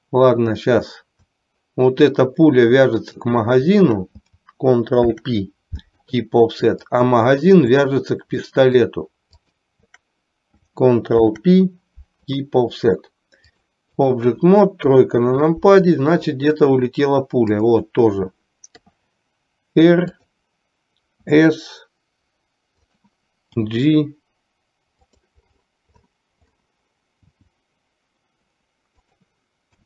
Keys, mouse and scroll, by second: 3.1 shift+click, 5.1 ctrl+p, 8.5 shift+middle click, 9.6 shift+click, 11.3 ctrl+p, 13.5 click, 15.0 KP_3, 17.6 click, 18.9 r, 21.3 s, 23.6 g, 27.4 g.